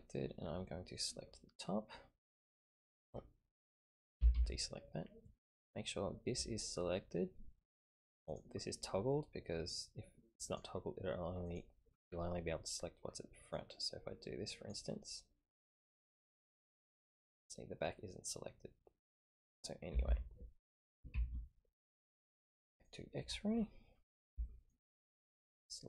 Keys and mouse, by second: 1.0-3.3 drag, 4.2 a, 4.3 a, 8.3 click, 10.4 click, 11.5 click, 13.5-14.8 drag, 15.2 middle click, 16.2-19.4 middle drag, 19.9 a, 20.1 a, 21.1 ctrl+KP_3, 22.8 click, 24.4 shift+middle click, 25.2-25.8 drag.